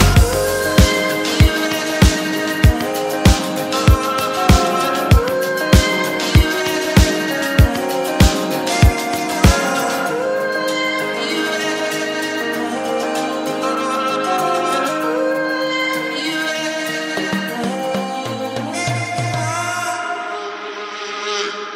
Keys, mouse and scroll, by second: 1.3 click, 2.7 click, 4.3 click, 4.8 click, 7.8 click, 9.5 click, 11.0-12.9 drag, 13.1 click, 14.6 click, 15.3 click, 16.0 click, 16.4 middle click, 16.4-16.8 scroll up 1, 17.8 click, 18.6 click.